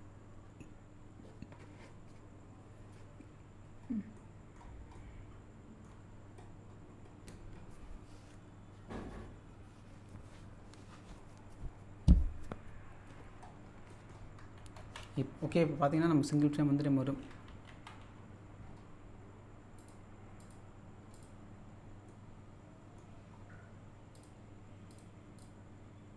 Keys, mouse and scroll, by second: 3.7-4.1 scroll up 1, 4.2-6.1 middle drag, 6.1-6.7 scroll down 1, 13.3-13.8 scroll down 1, 13.9 middle click, 15.6 scroll down 1, 19.8 click, 22.1-23.9 middle drag, 24.2 click.